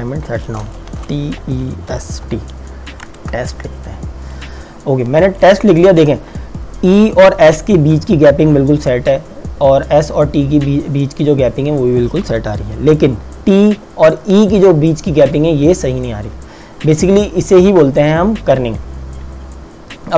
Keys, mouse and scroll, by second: 0.7-2.8 typing, 3.1 KP_Enter, 4.5 click, 15.3 t, 16.8 click.